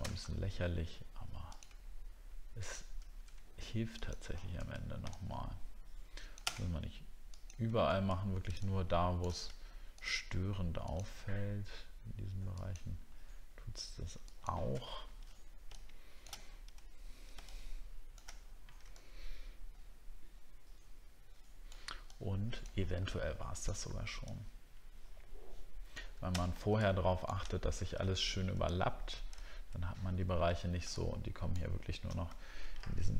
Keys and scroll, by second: 0.2 alt+scroll up 1, 8.1 alt+scroll down 1, 14.9 alt+scroll down 1, 18.4-18.8 alt+scroll down 8, 28.1 alt+scroll up 1, 29.4 alt+scroll down 1, 32.4 alt+scroll down 2.